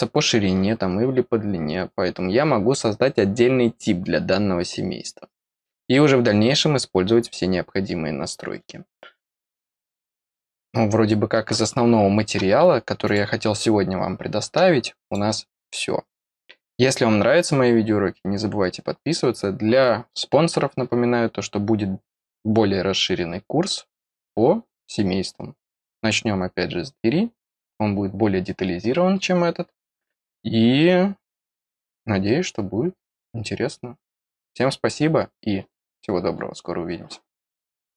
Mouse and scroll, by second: 13.0 click, 15.0 click, 16.3-16.8 scroll down 2, 24.2-25.2 scroll up 2, 25.2-37.1 scroll up 1, 37.1-37.5 scroll up 1, 37.5 middle click.